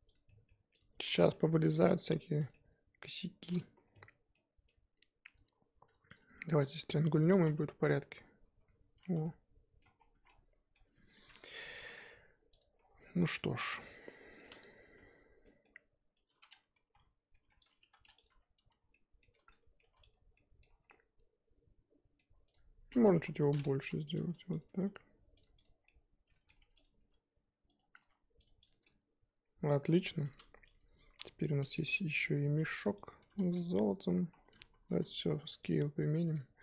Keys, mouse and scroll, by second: 0.1 click, 0.2-0.8 middle drag, 0.8 click, 1.0 z, 1.3 middle drag, 1.6 g, 2.5-3.1 middle drag, 3.1 g, 3.9-5.3 middle drag, 5.3-6.1 scroll down 1, 6.1 click, 6.6 z, 7.4 z, 7.5-8.6 middle drag, 8.6 j, 9.1 z, 9.2-9.9 middle drag, 9.9 scroll down 3, 10.1 Tab, 10.3-10.8 middle drag, 10.8 Tab, 11.1 3, 11.9 alt+click, 12.6 click, 12.8-13.2 scroll down 2, 13.2 alt+scroll up 1, 13.3-14.8 middle drag, 14.8 a, 16.5 click, 16.8 s, 18.3 Tab, 18.6 z, 18.8 scroll down 2, 18.9-19.4 middle drag, 19.4 Tab, 19.4-19.8 middle drag, 19.8 Tab, 20.0-20.4 drag, 20.4-20.8 middle drag, 20.8 scroll down 2, 20.9-22.5 middle drag, 22.5-23.1 scroll up 4, 23.1 KP_3, 23.7 s, 25.5 click, 25.8 scroll down 2, 25.8-26.8 middle drag, 26.8 click, 27.0 g, 28.0 g, 28.6 click, 28.8 scroll down 2, 28.8-29.9 middle drag, 29.9-30.2 scroll down 2, 30.2 click, 31.1 KP_1, 31.5 scroll down 3, 32.1 g, 34.3 scroll down 3, 34.5 a, 35.7 ctrl+a, 36.1 scroll up 4, 36.3 click.